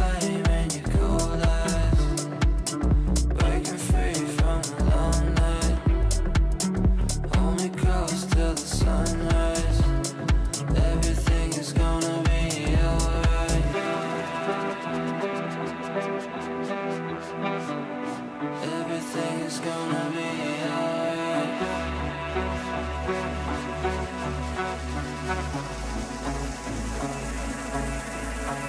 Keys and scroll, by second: 0.9 Delete, 27.1 g.